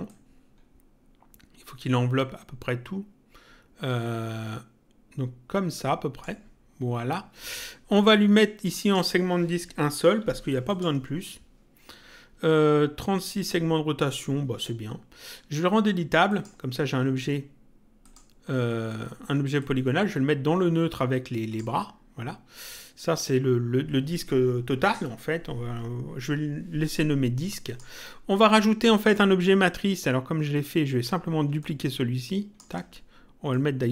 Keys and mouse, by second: 0.1 click, 8.6 click, 10.7 click, 16.3 click, 18.0 click, 19.6 click, 27.6 click, 28.9 click, 31.6 ctrl+click, 33.5 click.